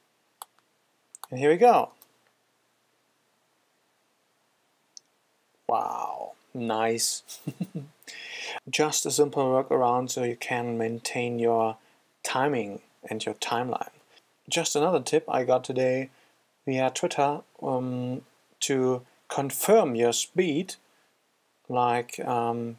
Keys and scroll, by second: 13.1 F4.